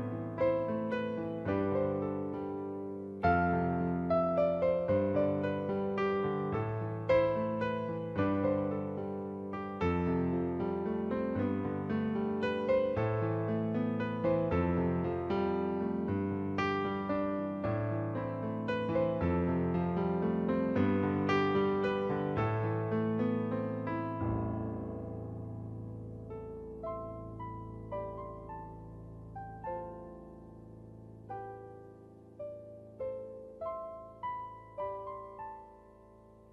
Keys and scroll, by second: 1.4 space, 17.8 ctrl+=, 32.1 ctrl+z, 33.2 space.